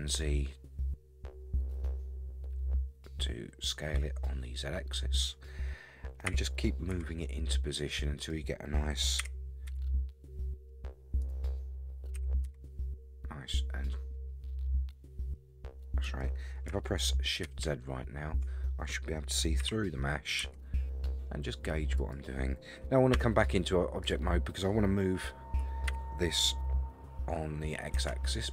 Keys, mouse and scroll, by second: 6.3 g, 9.2 g, 12.1 s, 17.5 shift+z, 19.6 s, 23.1 Tab, 24.0 click, 25.9 g.